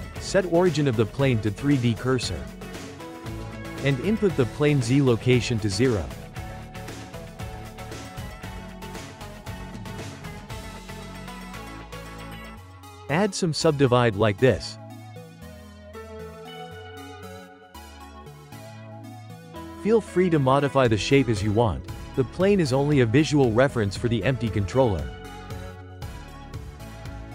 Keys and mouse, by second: 3.9-6.8 drag, 7.0-7.8 drag, 8.2-9.2 shift+middle drag, 9.2 ctrl+a, 10.8-11.5 ctrl+middle drag, 11.5 Tab, 12.4 ctrl+r, 14.7-18.2 drag, 18.2 ctrl+r, 20.9 click, 21.6 Tab, 22.1 Tab, 23.0 3, 23.3 click, 23.7 shift+click, 24.0 shift+click, 24.3 shift+click, 24.7 shift+click, 25.0 shift+click, 25.2 shift+click, 25.5 shift+click, 26.0 x.